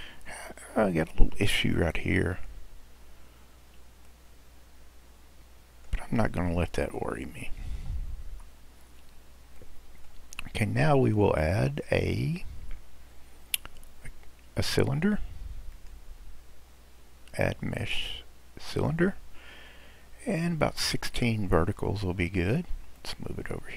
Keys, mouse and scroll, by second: 0.1 Tab, 0.9-1.3 scroll up 2, 1.8-6.1 middle drag, 6.1-7.2 scroll down 7, 7.2-8.3 middle drag, 8.3 Tab, 8.7-9.6 scroll down 2, 9.6-10.3 middle drag, 10.3 drag, 10.8-12.0 scroll down 8, 15.7-18.9 drag, 19.5-22.5 scroll down 1, 23.0 click.